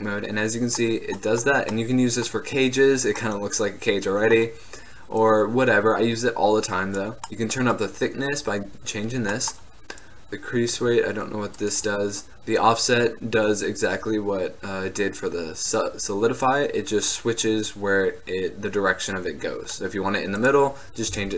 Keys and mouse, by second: 3.7-5.3 middle drag, 5.3-7.2 drag, 10.1-14.7 middle drag, 20.5-21.3 drag.